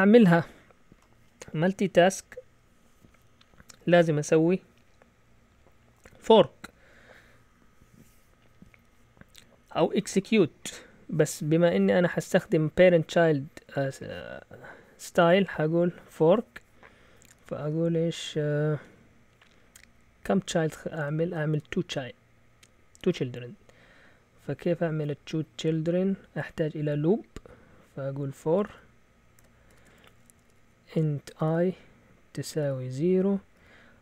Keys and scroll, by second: 17.4 0, 28.3-34.0 typing.